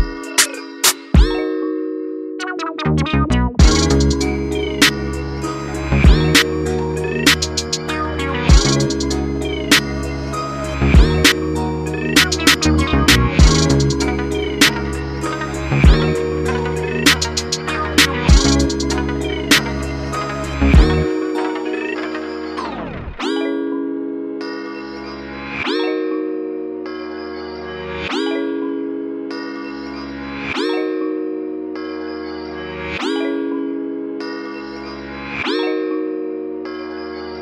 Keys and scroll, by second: 25.9-27.4 typing, 31.0 ctrl+i.